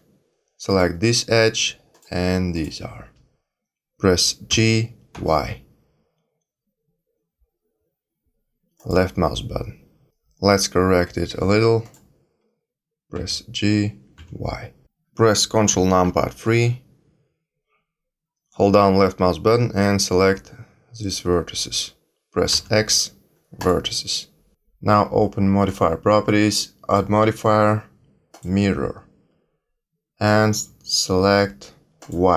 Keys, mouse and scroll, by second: 0.6 click, 1.9 shift+click, 2.5 shift+click, 4.4 g, 11.8 click, 13.1 g, 16.0 ctrl+KP_3, 18.7 click, 22.5 x, 25.6 click, 26.9 click, 31.9 click.